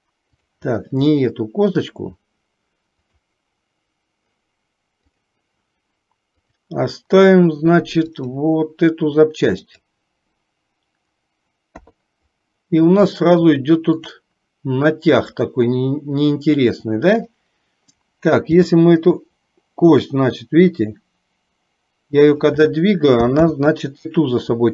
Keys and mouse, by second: 1.1 middle click, 3.1 click, 6.4 click, 8.1 click, 11.9 KP_3, 13.2 shift+middle click, 17.2 click, 18.6 g, 23.5 ctrl+z.